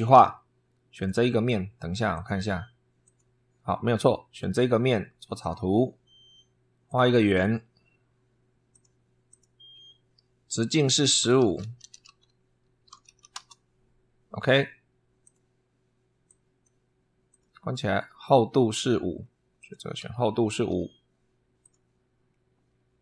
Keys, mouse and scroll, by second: 0.0 super+3, 0.7 click, 1.9 click, 2.9 click, 5.2 click, 6.7 click, 8.5 click, 9.1 click, 9.5 Escape, 10.7 click, 11.0-13.4 typing, 15.0 click, 16.1 click, 17.1 click, 17.6-18.1 scroll down 4, 19.4 click, 20.5 5, 21.4 click, 22.1 scroll down 2.